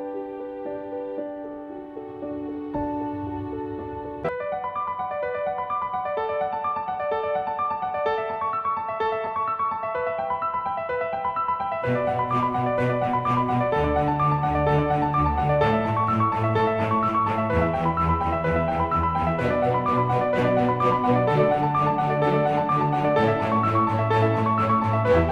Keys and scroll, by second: 1.9-19.9 typing, 17.5 ctrl+z, 22.8-24.2 typing.